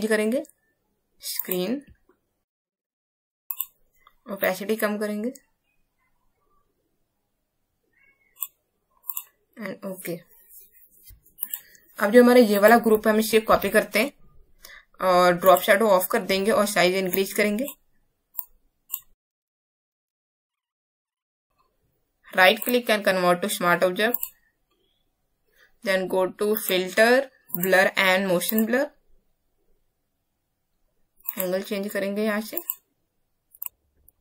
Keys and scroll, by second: 13.4 ctrl+j.